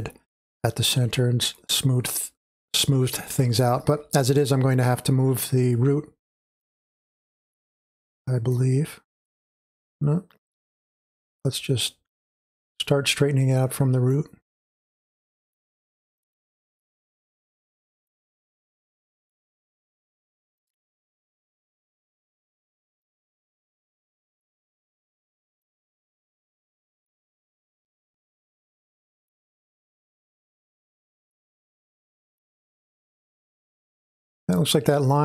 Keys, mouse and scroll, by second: 6.6-12.6 drag, 15.5-21.6 drag, 23.0-29.0 drag, 29.3-35.2 drag.